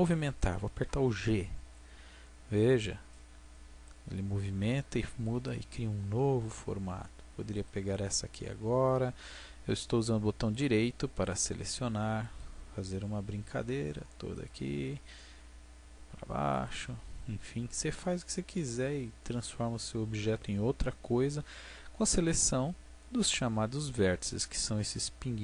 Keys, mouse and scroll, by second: 1.6 g, 5.2 click, 5.7-10.9 middle drag, 10.9 g, 12.3-13.9 drag, 14.3-16.3 right drag, 14.9 g, 16.6-18.3 drag, 18.8 middle click.